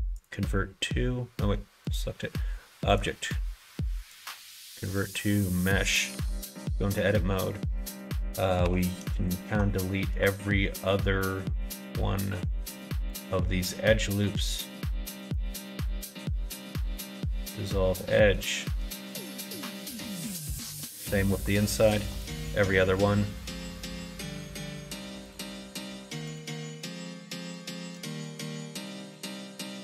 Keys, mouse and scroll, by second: 1.8 click, 2.9-5.3 drag, 5.7 middle click, 6.1 Tab, 6.4 middle click, 7.1 middle click, 8.6 2, 10.7 alt+shift+click, 12.3 alt+shift+click, 14.3 alt+shift+click, 15.1 alt+shift+click, 15.5 x, 18.0 middle click, 18.9 shift+middle click, 19.9 middle click, 21.1 shift+middle click, 21.9 alt+click, 23.6 alt+shift+click, 25.2 alt+shift+click, 26.3 alt+shift+click, 27.5 alt+shift+click, 28.1 x.